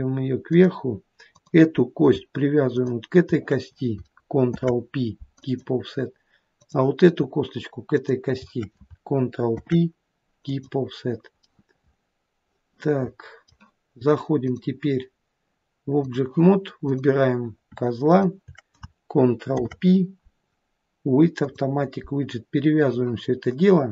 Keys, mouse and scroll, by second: 1.3 click, 2.7 shift+click, 4.6 ctrl+p, 6.6 click, 8.0 shift+click, 9.5 ctrl+p, 11.5 middle click, 12.0 middle click, 14.5 click, 16.9 click, 18.1 shift+click, 19.5 ctrl+p.